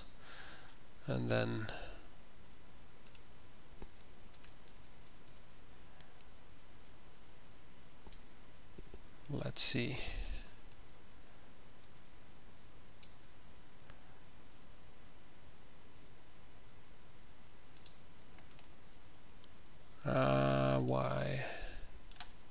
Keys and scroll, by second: 4.0-5.4 typing, 6.7 Tab, 6.9 Tab, 7.1 Tab, 7.2 Tab, 7.4 Tab, 8.3 ctrl+BackSpace, 10.3-11.8 typing.